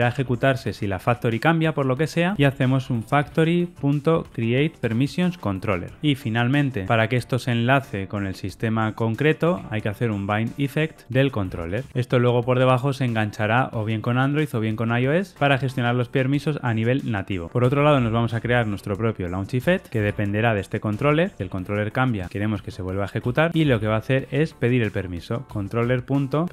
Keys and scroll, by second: 4.7 Return, 11.0 Return, 19.6 Return, 25.5 Return.